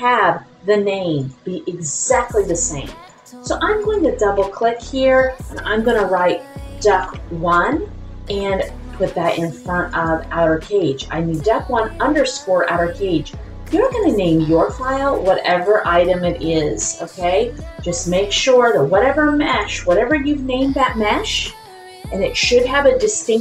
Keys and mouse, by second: 1.2 click, 2.3 click, 3.2-9.9 drag, 4.8 Left, 13.9-19.5 drag.